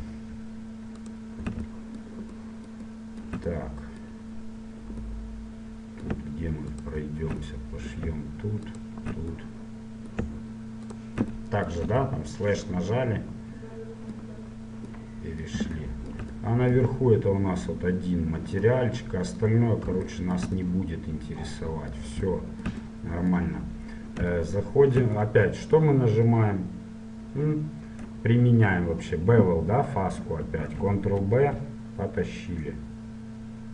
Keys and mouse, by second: 1.2-2.7 right drag, 2.7 middle click, 6.9-7.9 middle drag, 10.7 middle click, 12.0 KP_Divide, 13.0 middle click, 15.3-18.9 middle drag, 19.1 middle click, 19.7 middle click, 21.0 middle click, 29.7 middle click, 30.8 ctrl+b.